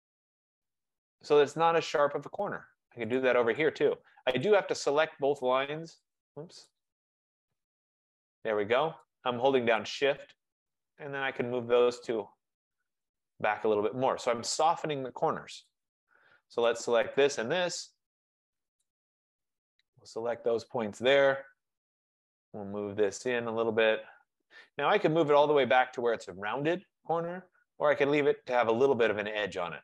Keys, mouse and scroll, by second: 0.9 click, 3.3 click, 4.6 click, 6.2 click, 6.9 click, 8.1 shift+click, 9.9 click, 13.1 click, 13.8-14.4 scroll, 14.9 scroll, 15.0 middle click, 15.8 click, 16.8 click, 17.4 shift+click, 20.4 click, 21.0-21.5 scroll, 25.5 scroll, 29.6 click.